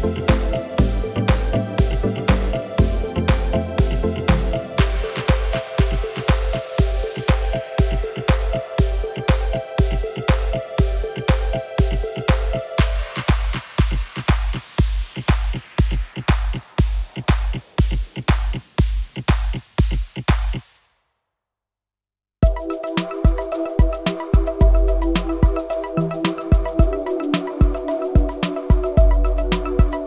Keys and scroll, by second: 4.9 shift+s, 10.0 r, 12.0 KP_9, 13.2 Escape, 13.7 r, 14.9 KP_9, 15.8 Return, 22.8 shift+s, 27.3 r, 28.6 KP_9, 29.9 Escape.